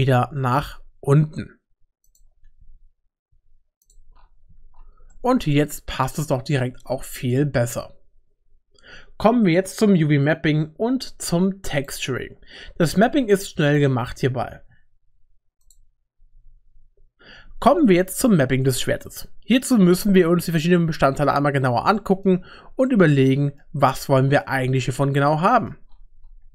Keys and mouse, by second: 2.1 ctrl+click, 2.6 x, 3.9 typing, 4.5 Tab, 5.1-6.5 middle drag, 22.0 middle click, 22.9 middle click, 24.8 shift+middle click, 25.5 middle click.